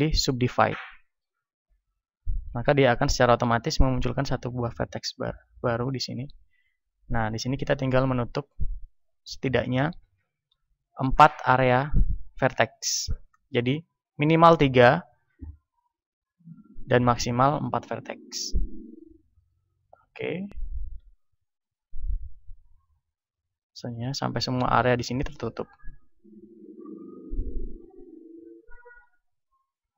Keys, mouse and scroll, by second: 2.1-3.9 middle drag, 3.1 a, 3.9-13.4 right drag, 10.1 f, 13.4-15.0 middle drag, 17.9 a, 18.7-23.5 right drag, 20.9 f, 23.9 f, 26.5 f, 28.9 f.